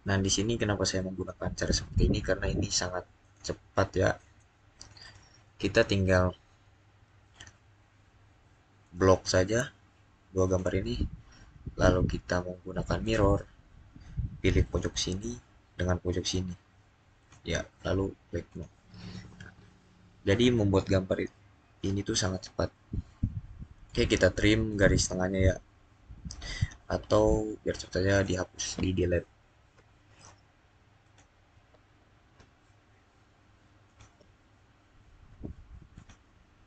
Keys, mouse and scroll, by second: 0.8 middle click, 3.1 click, 5.8-6.2 scroll up 1, 6.2 scroll down 1, 8.7 click, 12.9 click, 17.0 click, 19.3 scroll up 1, 20.4-24.8 middle drag, 24.8 click, 28.0 click, 30.9 click, 33.7 click, 35.8 click.